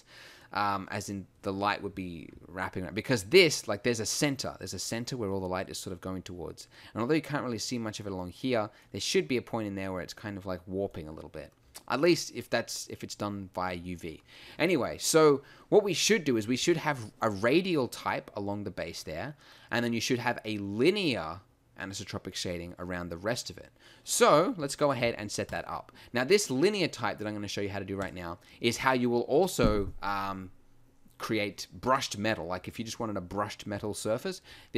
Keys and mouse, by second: 12.6-19.1 middle drag.